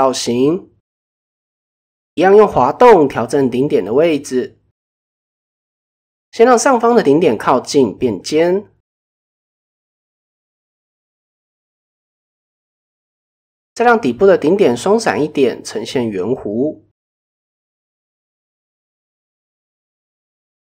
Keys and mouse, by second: 0.1 click, 0.4 shift+middle drag, 0.8-1.2 middle drag, 1.5 middle click, 3.0 alt+click, 4.5 g, 7.5-7.9 middle drag, 8.1-8.5 middle drag, 9.3 g, 10.6-11.0 middle drag, 11.3-11.6 middle drag, 11.9-12.3 middle drag, 12.5 shift+middle drag, 12.9-13.3 middle drag, 14.4 g, 16.3 shift+middle click, 17.1 g, 18.0 middle click, 18.7 middle click, 19.2 middle click, 19.9 middle click.